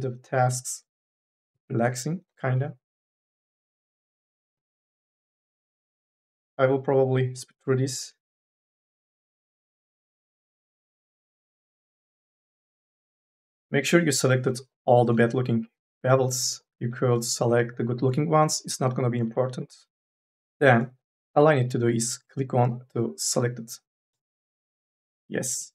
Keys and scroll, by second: 25.4 4.